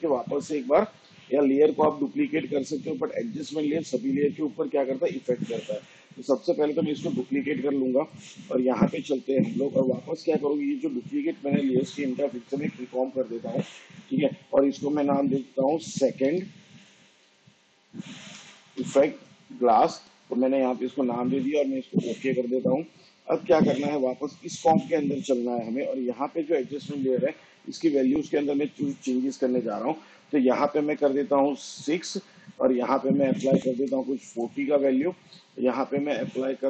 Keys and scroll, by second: 6.6 ctrl+d, 12.3 ctrl+shift+c, 15.4-20.9 typing, 31.0 6, 33.4 4, 33.7 0.